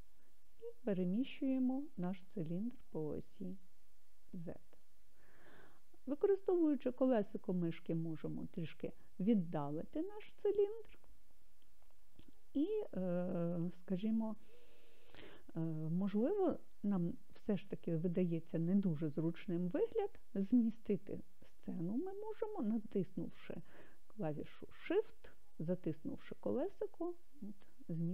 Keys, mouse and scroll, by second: 4.8 click, 6.7-7.9 scroll down 2, 14.8-16.5 scroll up 1, 26.0-28.1 shift+middle drag.